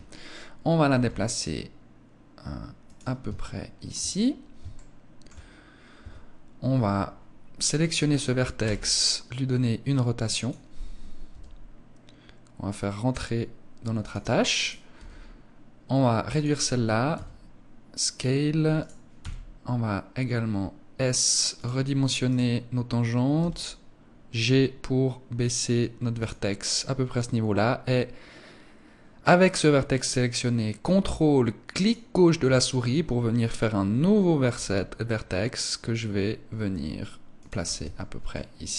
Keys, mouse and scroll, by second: 0.4 g, 2.4 click, 2.9 shift+middle click, 3.6 scroll up 3, 4.2 shift+middle click, 5.5 Tab, 7.0 right click, 8.1 r, 10.0 click, 10.8 g, 13.6 click, 14.1 right click, 14.4 g, 15.9 click, 16.6 s, 17.6 click, 18.2 right click, 21.1 click, 21.8 right click, 22.8 g, 25.8 click, 31.3 ctrl+click, 34.0 g, 37.0 click, 37.3 Tab, 37.8 middle click.